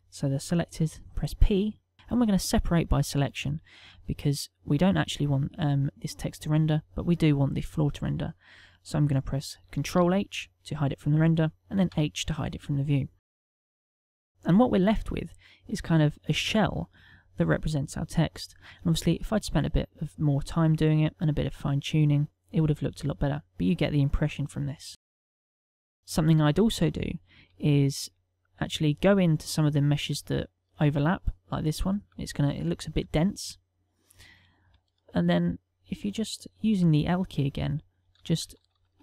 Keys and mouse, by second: 0.8 p, 3.8 Tab, 4.4 click, 9.9 ctrl+h, 11.9 h, 13.6 middle click, 20.9 middle click, 22.1 KP_0, 24.0 middle click, 25.1 ctrl+middle click, 25.6 middle click, 26.2 shift+middle click, 26.6 middle click, 27.2 shift+middle click, 27.8 ctrl+middle click, 28.4 click, 28.9 ctrl+middle click, 29.8 middle click, 30.2 ctrl+middle click, 33.0 Tab, 33.4 middle click, 34.6 shift+middle click, 35.1 ctrl+middle click, 38.2-39.0 typing.